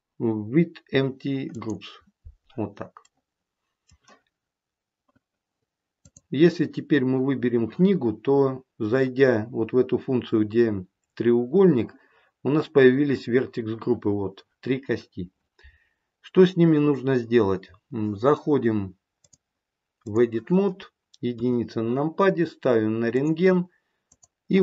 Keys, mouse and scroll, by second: 3.0 middle click, 6.0 click, 19.1 click, 21.3 KP_1, 23.1 click, 24.0 click.